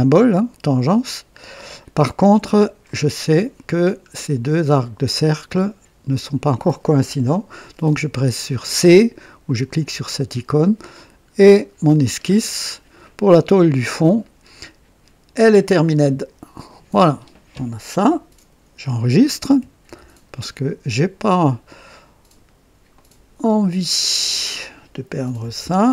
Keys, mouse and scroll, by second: 1.7-2.6 scroll down 3, 2.8-3.5 right drag, 3.7-4.0 scroll down 2, 5.4-6.4 drag, 9.6 c, 10.8-11.2 scroll up 2, 11.4-12.1 right drag, 12.1 scroll down 2, 13.0-13.6 right drag, 13.6 scroll down 1, 15.7 click, 19.8 ctrl+s, 22.8 click, 24.1 click, 25.3-25.9 typing.